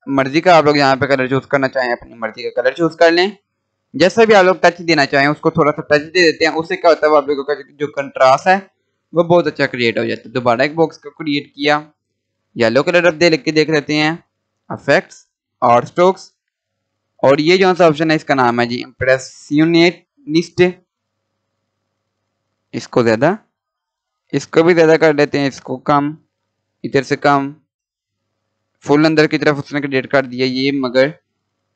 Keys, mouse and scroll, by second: 6.0 click, 8.1 scroll up 1, 9.1 Delete, 10.2-12.3 drag, 19.7 click, 29.8-30.6 scroll up 1, 30.6-31.5 scroll down 1, 31.5-31.7 drag.